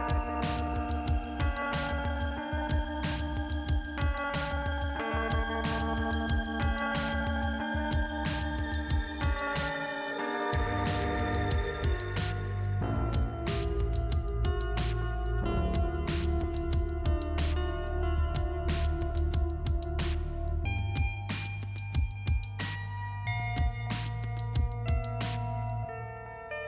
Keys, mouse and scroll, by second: 1.2 click, 3.5 scroll up 1, 5.1 click, 7.3 click, 9.4 click, 10.5 click, 14.7 click, 17.2 click, 20.7 click, 20.8 click, 21.9 click, 24.1 click.